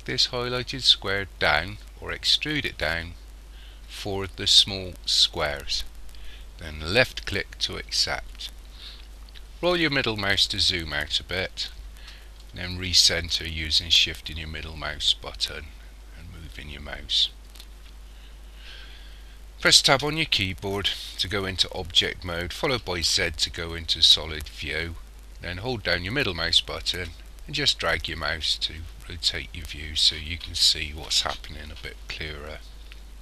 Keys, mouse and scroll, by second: 9.5-11.2 scroll down 5, 11.2-12.4 scroll down 1, 12.4 shift+middle click, 19.9 Tab, 23.1 z, 25.7 middle click.